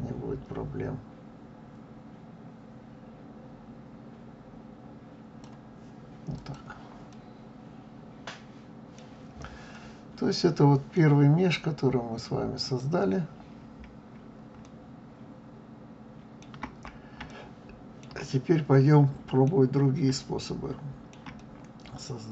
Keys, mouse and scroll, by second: 6.3 click, 7.1-12.6 middle drag, 12.6 click, 14.0-14.6 scroll up 2, 14.6-16.7 middle drag, 16.7-17.3 scroll down 1, 17.3-19.5 shift+middle drag, 19.5-20.2 scroll down 2, 20.2-22.3 shift+middle drag.